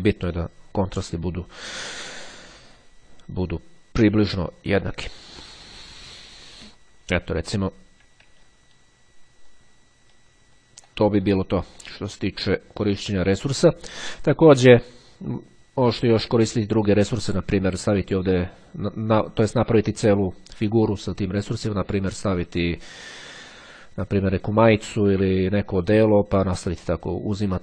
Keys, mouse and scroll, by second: 8.5-9.4 ctrl+scroll down 2, 9.5-10.1 ctrl+scroll up 2, 10.9 ctrl+click, 12.3 ctrl+click, 12.6-13.1 ctrl+scroll down 2.